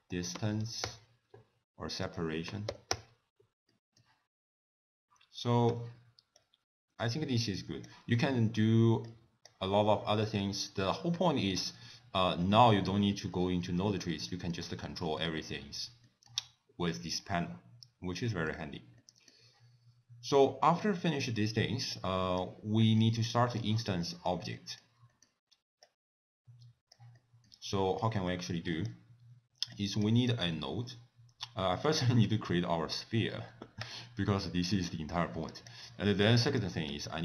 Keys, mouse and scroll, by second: 2.1 click, 3.8 middle click, 5.8 n, 6.5 click, 9.1 click, 11.0 middle click, 11.5-12.5 scroll down 6, 12.5 middle click, 13.2 scroll down 2, 13.4 middle click, 14.3 middle click, 14.8-16.1 scroll up 7, 16.1 middle click, 18.4 middle click, 18.8 scroll down 2, 19.0 middle click, 21.0 middle click, 22.0 click, 22.5 click, 23.1 middle click, 24.1 middle click, 24.6 middle click, 25.2 middle click, 25.9 click, 27.2 middle click, 27.8 middle click, 28.8 click, 29.8 click, 30.3 click, 32.0 click, 32.3 shift+a, 35.7 click, 36.1 middle click, 36.6 click, 37.0 ctrl+a.